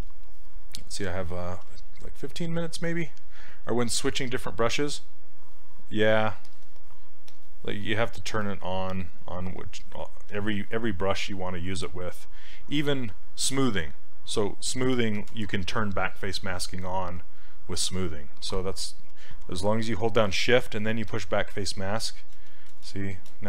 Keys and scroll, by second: 1.7 s, 2.9 s.